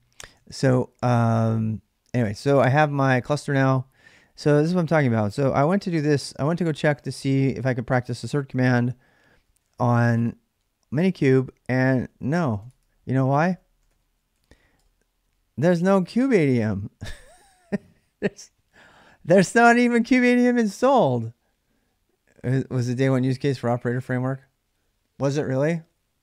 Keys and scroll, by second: 0.3 ctrl+a, 0.5 ctrl+a, 5.0-6.1 typing, 8.9-10.1 typing, 11.5-12.3 typing, 12.4 Tab, 13.5-14.3 typing, 14.5 Return.